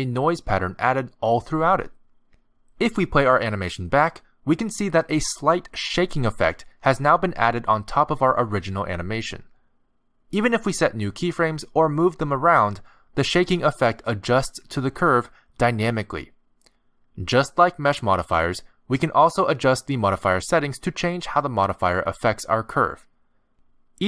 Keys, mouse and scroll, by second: 11.8 click, 12.3 shift+d, 14.6 click, 14.9 g, 18.9 click, 19.4 x, 22.5 click.